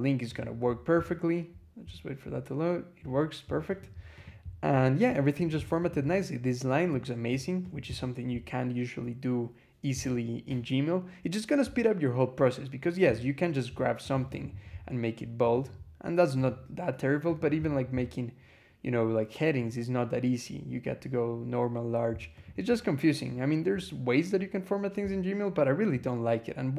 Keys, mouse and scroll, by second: 0.1 click, 3.6 click, 4.0 click, 4.6 scroll down 1, 5.2 click, 5.7 click, 6.8-7.3 drag, 7.5 click, 8.3 scroll down 1, 10.5 scroll down 2, 11.6-12.0 scroll down 2, 13.9 click, 15.3 click, 16.2 click, 17.1 click, 22.2 click, 25.0 scroll down 2, 25.9 scroll down 2.